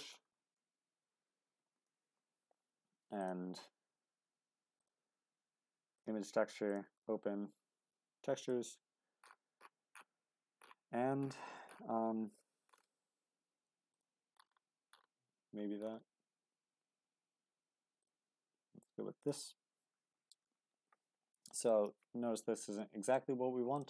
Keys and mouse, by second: 0.7 BackSpace, 4.9-6.1 drag, 22.8 middle click.